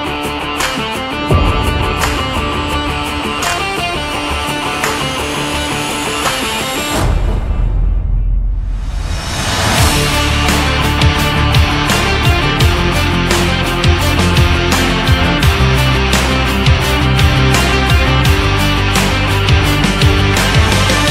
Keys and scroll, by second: 6.9 Left, 15.4 ctrl+=, 20.2 Left.